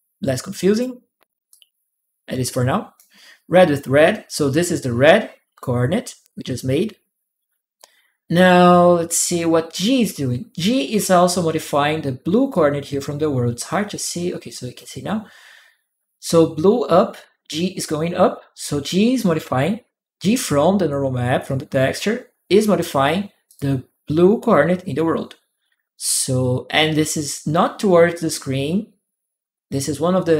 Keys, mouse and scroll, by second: 1.3-2.7 drag, 4.0-5.4 drag, 12.3-14.5 drag, 21.2-22.6 drag, 23.3 click.